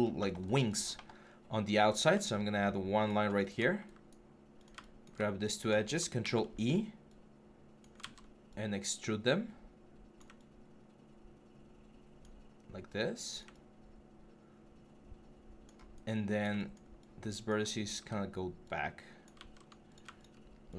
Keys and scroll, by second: 6.0 ctrl+e, 7.8 ctrl+z, 17.8 w, 19.2 ctrl+z.